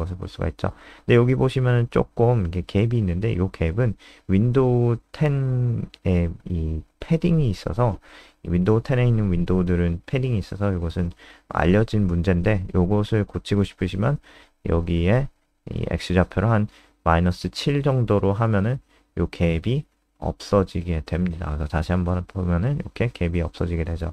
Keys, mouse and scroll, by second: 5.5 click, 10.3 click, 12.2 click, 12.8 Right, 13.0 BackSpace, 14.4-15.2 typing, 16.3 click, 16.6 ctrl+s, 17.0 click, 18.3 F3, 19.7 click, 20.2 click, 20.9 KP_1.